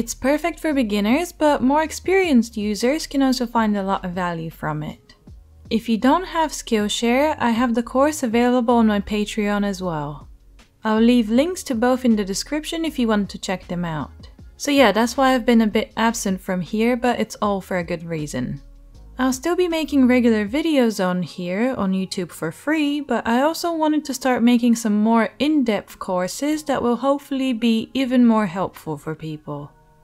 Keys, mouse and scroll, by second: 0.0-2.9 shift+right drag, 2.9 middle click, 3.1-8.3 right drag, 3.1 g, 5.6 Tab, 6.2 click, 6.2 middle click, 8.3-11.1 shift+middle drag, 11.1 click, 14.2-17.2 right drag, 17.2 middle click, 17.4 right click, 17.5 middle click, 17.7 right click, 18.0 middle click, 18.2 right click, 18.3-19.3 drag, 19.5 click, 21.0 middle click, 21.4 e, 23.8 y, 24.5 r, 24.6-30.0 drag, 24.7 g, 26.5 ctrl+z.